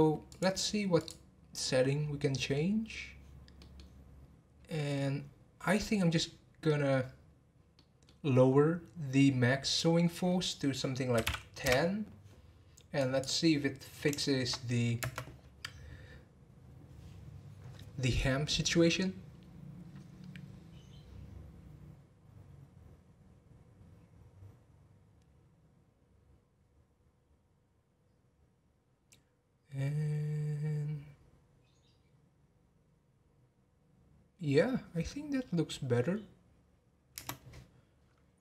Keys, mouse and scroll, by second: 0.2 click, 1.0 click, 1.6-2.9 scroll down 14, 2.9-3.5 scroll down 1, 3.5-4.8 middle drag, 4.8-5.8 scroll down 2, 5.8 middle click, 6.0-6.6 scroll down 1, 6.6-9.7 middle drag, 9.7-12.7 drag, 13.0-14.2 drag, 14.2 shift+middle drag, 14.5-15.0 scroll up 1, 15.0 space, 37.4 space.